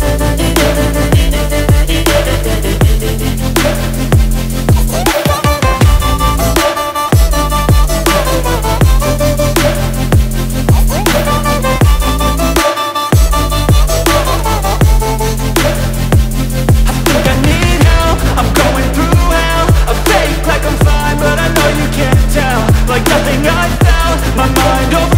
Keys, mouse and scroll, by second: 4.1-7.1 drag, 20.6 Tab, 24.1 click.